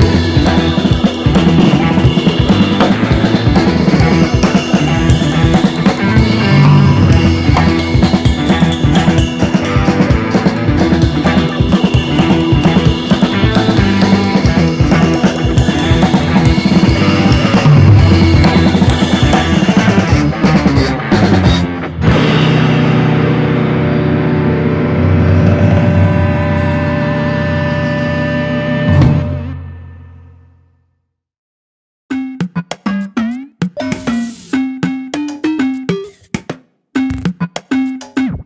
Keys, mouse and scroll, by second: 0.2 middle click, 0.9 click, 1.0 alt+/, 1.2 click, 1.5 alt+/, 2.8-3.2 scroll down 3, 3.0 alt+/, 3.2 middle click, 3.5 click, 3.6 middle click, 4.0 scroll up 3, 4.1-5.1 middle drag, 5.3 KP_7, 6.2 shift+s, 7.2 Tab, 8.4-9.4 drag, 9.9 shift+s, 11.1-12.1 drag, 13.9-14.4 scroll down 1, 14.4 Tab, 16.1 s, 17.5-18.0 scroll up 1, 18.0 click, 18.4 g, 20.5 click, 21.2 r, 22.1 s, 22.8-23.2 scroll up 1, 23.2 click, 23.7 click, 23.9 scroll up 1, 24.1 shift+middle click, 24.4 click, 25.1 s, 26.6-27.6 drag, 28.3 click, 29.5 click, 30.0 s, 31.0 click, 31.7 s, 32.4 click, 33.2 click, 33.4 click, 34.6-35.6 drag, 35.7-36.0 scroll down 1, 36.0 middle click, 36.5 click, 37.0 KP_3, 37.2 click, 37.5-38.4 drag.